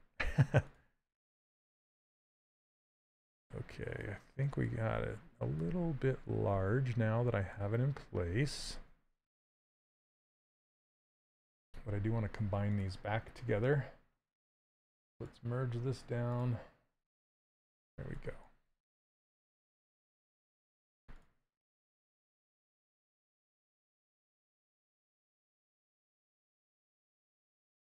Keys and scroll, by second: 18.7 w, 26.2 x.